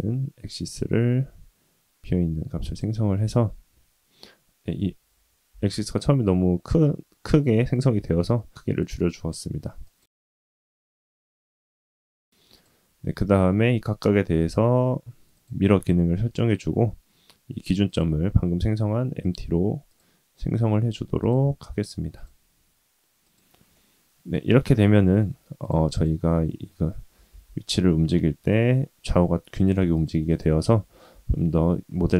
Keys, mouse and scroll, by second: 5.6 ctrl+z, 8.2 s, 12.1 click, 12.5 click, 13.7 click, 14.4-15.4 drag, 16.5 click, 19.2 click, 19.9-21.3 drag, 22.1 click, 23.7-25.2 middle drag, 25.6 click, 25.9 click, 27.1 g, 29.9 click, 30.3 click, 30.7 g.